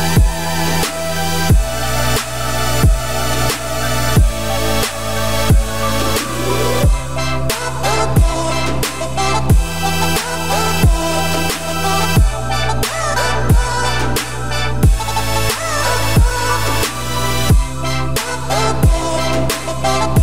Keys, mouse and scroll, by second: 2.4-3.4 scroll down 10, 3.4-5.6 middle drag, 5.6 click, 5.8 `, 6.3 scroll down 2, 6.5-7.0 middle drag, 7.0 g, 11.0 click, 11.2 scroll down 3, 11.4-11.9 middle drag, 11.9-12.3 scroll down 3, 12.3-13.0 middle drag, 13.0-13.6 scroll up 2, 13.6 click, 13.7 `, 14.4-14.8 scroll down 3, 14.8 click, 15.7 g, 17.0 scroll down 1, 17.1-17.9 middle drag, 17.9 g, 18.8 scroll down 2, 18.9-19.4 middle drag, 19.4-20.1 scroll down 10.